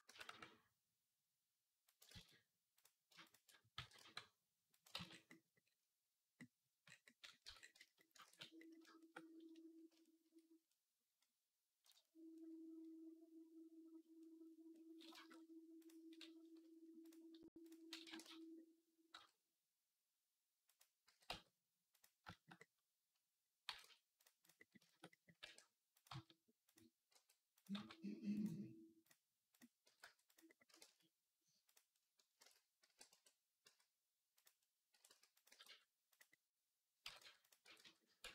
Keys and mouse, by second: 1.8 ctrl+click, 1.9 ctrl+z, 2.0-3.1 middle drag, 3.1 alt+shift+click, 3.2-15.1 middle drag, 3.6 g, 4.8 ctrl+z, 7.3 Tab, 8.1 ctrl+s, 15.1 click, 15.3-20.6 drag, 17.9 r, 20.6-24.0 middle drag, 20.9 g, 23.5 g, 24.2 click, 25.2 r, 25.9 g, 26.9 r, 27.5 g, 29.7 g, 30.5 r, 32.2 ctrl+z, 33.2 r, 34.6-36.5 middle drag, 34.7 r, 35.3 g, 36.9 g, 37.5 r.